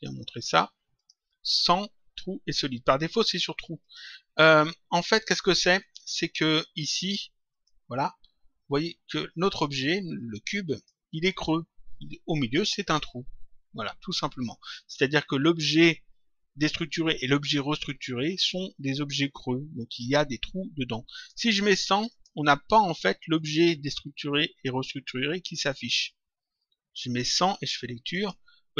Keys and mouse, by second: 0.9 click, 3.7 click, 4.9 click, 7.4 click, 9.0 click, 10.1 click, 21.1 click, 23.3 click, 25.9 click, 28.1 click.